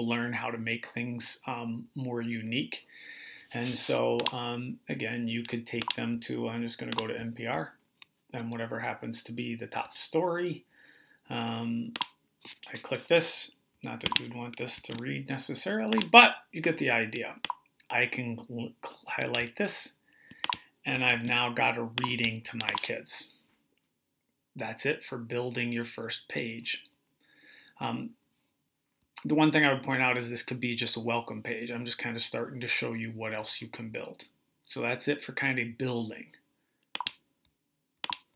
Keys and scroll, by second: 14.6 super+c, 20.9 super+v.